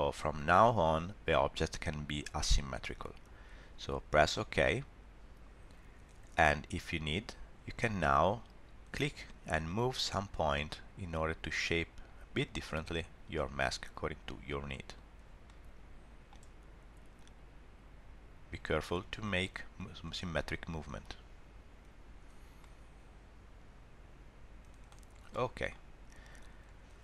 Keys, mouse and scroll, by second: 9.0 click, 12.4 click, 15.4 middle click, 17.2 click, 18.9 middle click, 20.8 click, 22.6 middle click, 25.2 scroll down 1, 25.3 middle click, 25.9 scroll up 1.